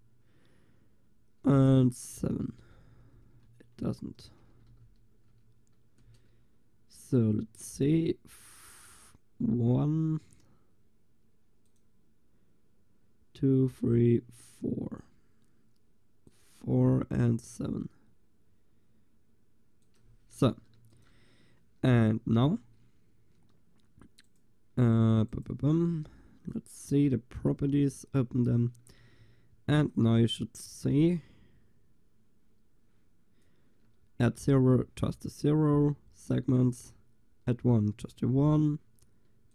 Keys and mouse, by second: 2.4 Right, 2.8 Right, 4.8 Delete, 11.7-20.8 drag, 20.8 ctrl+s, 22.1-23.9 drag, 24.3-27.5 middle drag, 29.1 shift+z.